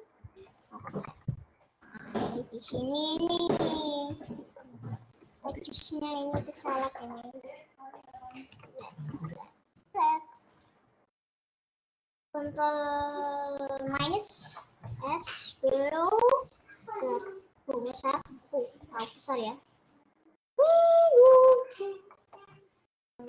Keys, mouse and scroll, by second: 0.8 ctrl+z, 1.1-3.9 ctrl+middle drag, 3.9 click, 5.1-6.2 shift+drag, 6.7 shift+click, 7.6 shift+click, 8.7 ctrl+z, 9.2 ctrl+z, 9.8 ctrl+z, 11.3-14.0 drag, 14.0 KP_Subtract, 15.0 middle click, 15.3 s, 16.9 scroll down 1, 17.0-18.2 middle drag, 18.2 s, 19.8 click, 22.2 middle click, 22.6 scroll up 2.